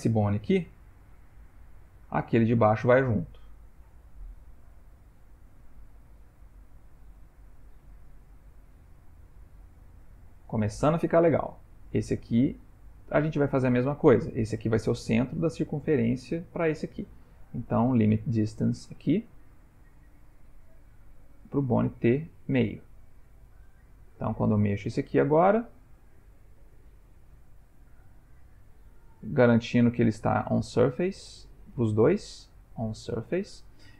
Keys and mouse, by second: 0.7 g, 11.8 click, 17.7 click, 20.2 click, 22.1 click, 24.6 click, 25.1 g, 29.5 click, 31.5 click.